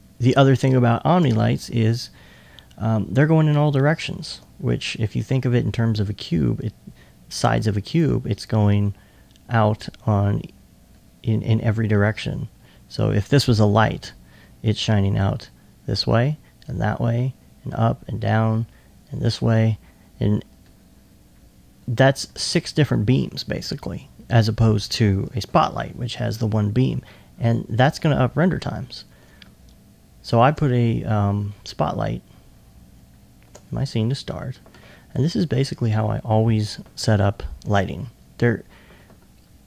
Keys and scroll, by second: 0.3 s, 1.5 alt+2, 2.4 alt+2, 11.9 s, 12.4 alt+s, 22.2 alt+2, 22.4 alt+2, 22.8 alt+1, 33.8 alt+2, 34.4 alt+2, 34.7 alt+1, 36.8 1.